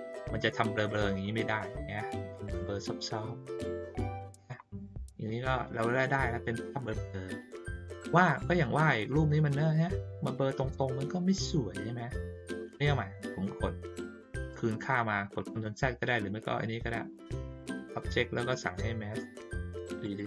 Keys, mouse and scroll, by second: 0.7 ctrl+scroll up 1, 1.0 ctrl+scroll down 1, 3.2 scroll down 1, 3.3 ctrl+middle click, 4.0-4.4 middle drag, 7.7 middle click, 12.0-12.7 ctrl+scroll up 1, 12.7 scroll down 1, 12.8 ctrl+middle click, 15.4 click, 20.0 click.